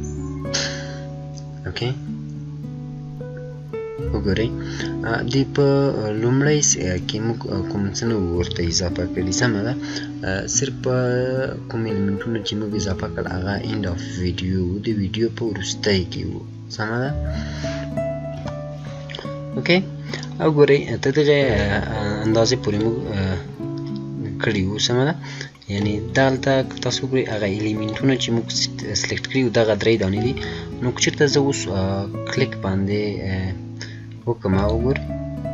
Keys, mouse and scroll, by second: 18.2 F9, 19.9-21.4 scroll down 1, 22.6 click, 25.9-26.7 scroll down 1, 27.2-30.4 drag, 30.4 scroll up 1, 34.4 click.